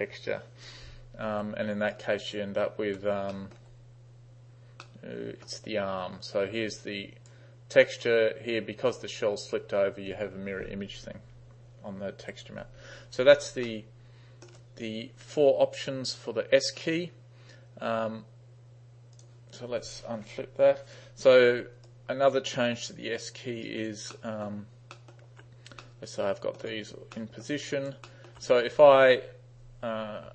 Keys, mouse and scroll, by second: 1.4 3, 2.0 right click, 3.3 t, 3.4 middle drag, 3.6 t, 4.9-5.5 middle drag, 7.0 click, 12.2 u, 13.6 space, 13.7-14.5 middle drag, 19.2 click, 20.3 Left, 21.9 alt+right click, 22.9 alt+right click, 23.7 alt+right click, 24.2-24.5 alt+middle drag, 25.0 alt+middle click, 25.8-26.6 middle drag, 25.8 space, 27.2-27.5 alt+middle drag, 27.7 alt+right click, 28.0 alt+middle click.